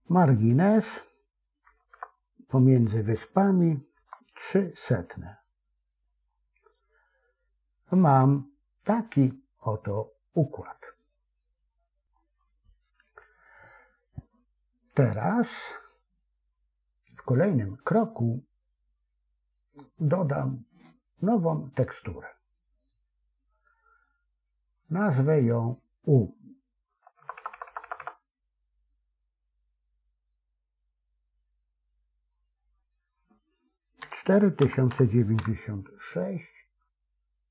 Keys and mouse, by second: 1.8 BackSpace, 22.7-37.5 drag, 27.1 BackSpace, 27.4 BackSpace, 27.6 BackSpace, 27.9 BackSpace.